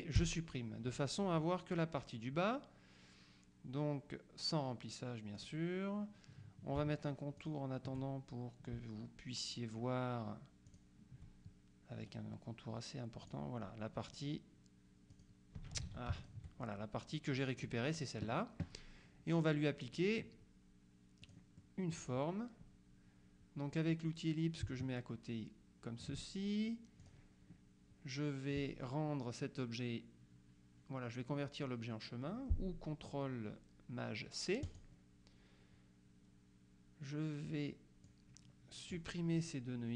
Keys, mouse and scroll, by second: 0.2 Delete, 5.4 click, 7.5 shift+click, 10.8 shift+click, 12.1 right click, 13.3 click, 15.2 click, 15.9 ctrl+z, 16.3 ctrl+shift+click, 21.3 click, 24.7-26.6 ctrl+drag, 27.1 click, 34.8 click, 38.1 click.